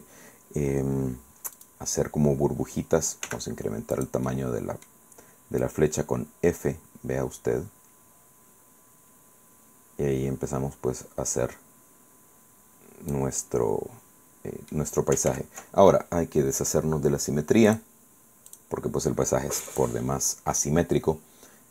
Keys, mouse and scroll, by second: 1.6 click, 3.3 f, 4.0 click, 5.6-13.4 drag, 13.4-15.0 middle drag, 15.3 ctrl+z, 17.7 click, 18.6 click, 19.7 click.